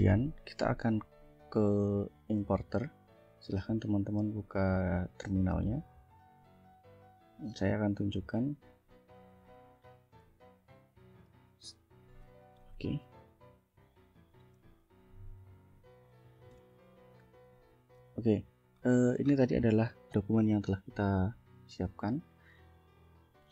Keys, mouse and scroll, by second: 4.3 click, 7.1 click, 9.3 F4, 10.9-12.1 drag, 12.6 Left, 13.9 ctrl+click, 15.0 click, 16.6 ctrl+l, 17.5 click, 18.7-19.2 ctrl+scroll up 2, 19.7 ctrl+scroll up 2, 22.1 click, 23.1-23.5 drag.